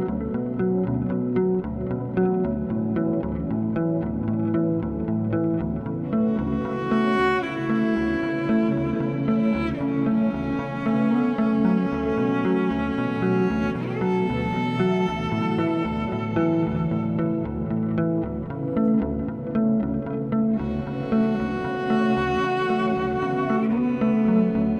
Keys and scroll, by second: 3.8 s, 11.1 2, 16.7 s, 23.8 4.